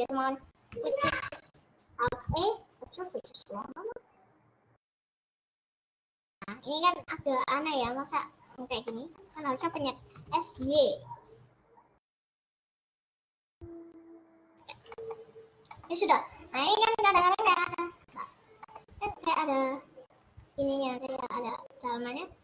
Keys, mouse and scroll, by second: 0.0-1.0 scroll up 9, 1.3 middle click, 1.4 scroll down 4, 3.3 alt+e, 5.8-7.9 middle drag, 8.9-10.1 middle drag, 10.1 s, 15.1 middle click, 15.3-15.6 scroll down 2, 15.6 middle click, 16.0-16.5 scroll up 2, 16.5-22.4 middle drag.